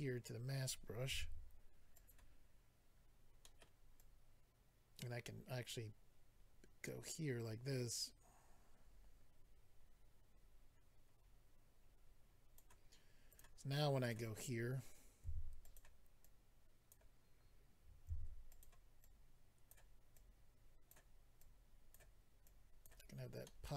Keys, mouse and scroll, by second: 1.1 f, 1.9 click, 2.1 click, 3.4 middle click, 3.6 middle click, 4.0 click, 13.3 click, 13.4 click, 14.0 click, 14.1 click, 15.2 f, 15.6 click, 16.2 click, 18.1 f, 18.5 click, 18.6 click, 19.0 click, 20.1 click, 21.9 click, 22.4 click, 23.1-23.6 scroll down 2, 23.4 middle click.